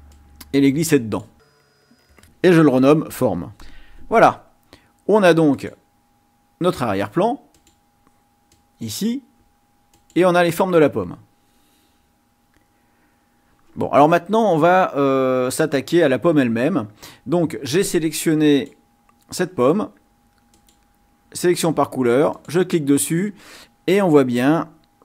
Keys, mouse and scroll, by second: 0.1-1.4 drag, 1.6 click, 2.0 click, 5.6 click, 7.5 click, 8.5 click, 10.0 click, 18.5 click, 20.5 click, 22.3 click, 24.6-25.0 ctrl+scroll up 2.